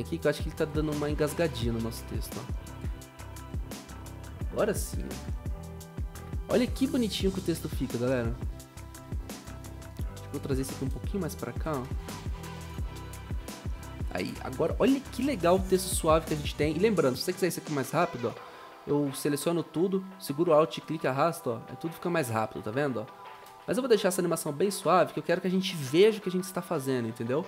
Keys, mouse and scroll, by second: 0.7 0, 0.9 Return, 2.8 0, 8.2 typing, 11.1 alt+Right, 11.4 alt+Right, 11.8 0, 14.3 0, 20.9 0, 22.6 0, 23.6 ctrl+z, 24.1 0, 25.1 ctrl+z, 25.8 0.